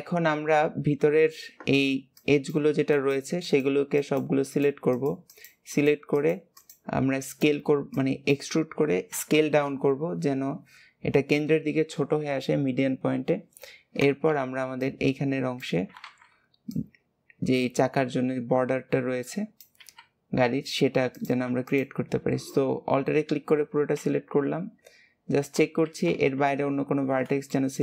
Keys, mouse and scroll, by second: 14.3 Escape, 14.7 click, 20.4-21.1 scroll up 1, 21.1 click, 21.6 alt+shift+click, 23.2 scroll down 2, 23.6 alt+z, 24.7-25.1 scroll up 2, 25.1-25.6 scroll down 4, 25.6 alt+z, 26.5 scroll up 3, 27.4 shift+middle click.